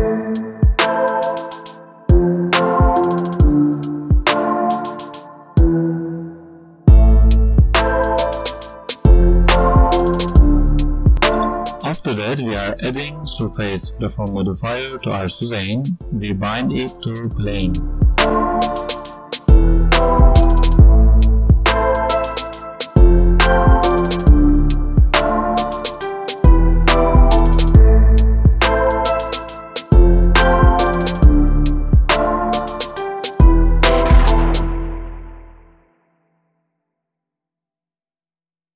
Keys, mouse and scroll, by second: 0.6 click, 3.0 click, 4.6 click, 5.6 click, 5.8 space, 6.6 right click, 10.0 space, 10.5 click, 10.8 click, 11.0 right click, 12.5 click, 14.1 click, 15.4 click, 17.1 space, 29.0 click.